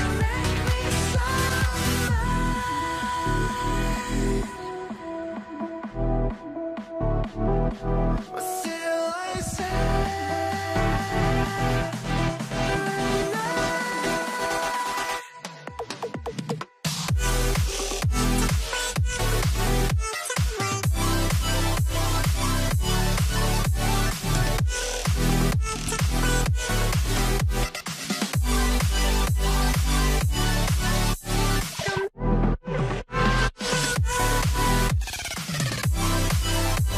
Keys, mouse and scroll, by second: 0.3 middle click, 1.0 double click, 4.4 double click, 17.6 middle click, 17.8 scroll down 1, 18.0 z, 18.4 right click, 20.4 scroll down 1, 20.7 ctrl+a, 21.3 right click, 26.8 double click, 27.6 shift+t, 35.3 scroll down 1.